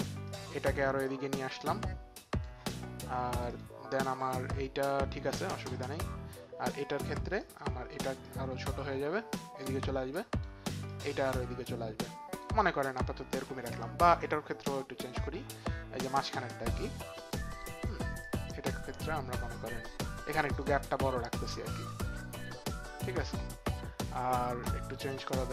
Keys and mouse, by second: 0.3 click, 1.0 click, 3.5 click, 5.9 click, 7.4 click, 10.1 click, 11.6 click, 14.6 click, 16.3 click, 17.3 click, 18.2 click, 18.7 click, 20.4 click, 21.4 click, 25.3 click.